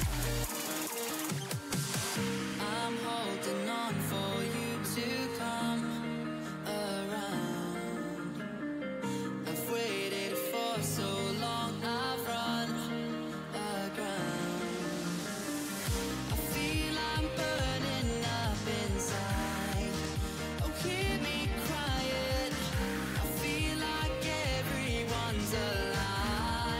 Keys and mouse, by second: 1.7-4.5 drag, 5.7 middle click, 8.2 click, 8.6 a, 12.6 ctrl+alt+shift+e, 14.6 click, 15.4 a, 15.6 a, 16.2 w, 18.8 z, 19.5 z, 19.7 Tab, 21.5-24.0 drag, 22.5 Tab, 24.0 ctrl+r.